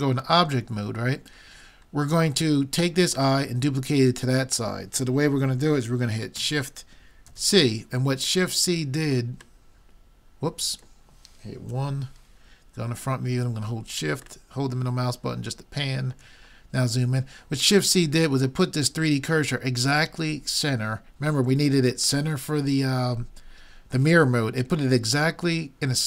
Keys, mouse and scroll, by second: 7.3 shift+c, 8.5 middle click, 11.7 KP_1.